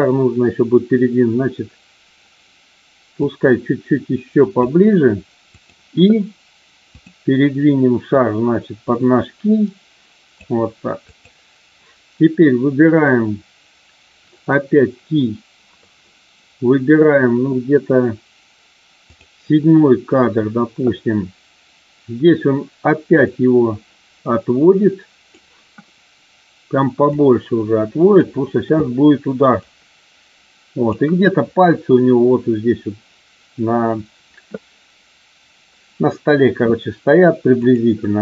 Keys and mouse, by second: 3.2-4.6 drag, 6.8 click, 8.1-10.3 drag, 11.1 click, 19.0 click, 23.3-25.2 drag, 27.2-28.2 drag, 29.6-30.8 drag, 37.6 click.